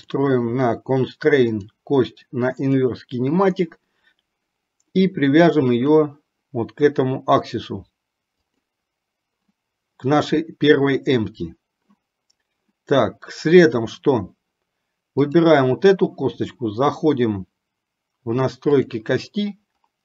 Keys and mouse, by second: 1.7 click, 6.0 click, 15.6 click, 18.8 click.